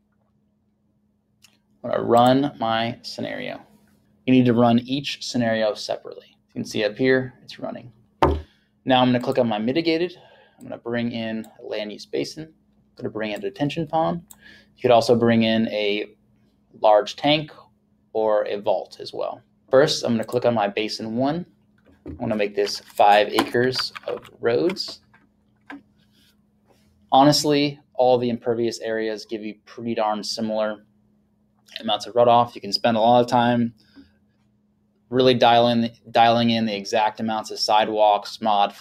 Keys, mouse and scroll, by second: 2.2 click, 9.2 click, 10.7 click, 19.7 click, 22.9 click, 24.2 KP_5.